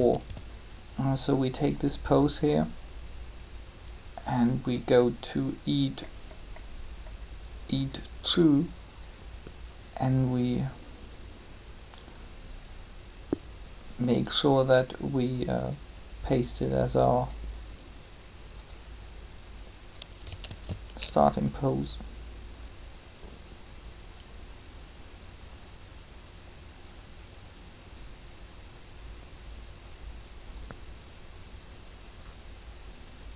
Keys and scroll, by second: 0.0-0.2 typing, 20.4 alt+a.